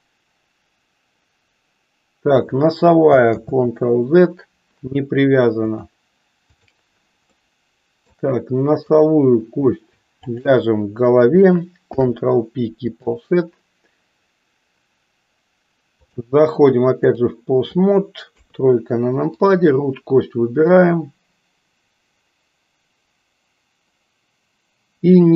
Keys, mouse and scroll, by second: 0.1-2.6 drag, 3.5 ctrl+z, 5.7-6.8 drag, 7.4 middle click, 8.8 click, 10.1 shift+click, 11.9 ctrl+p, 16.0-17.2 drag, 18.2 KP_3, 19.3 click, 20.9-25.3 drag.